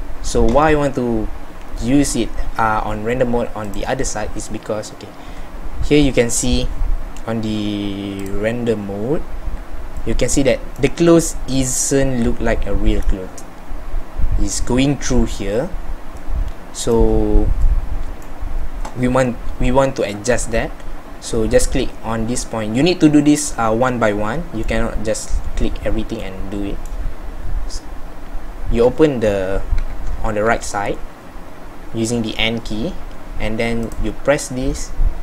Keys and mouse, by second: 25.7 middle click, 26.0 middle click, 26.2 middle click, 26.6 middle click, 29.8 n, 30.5 n.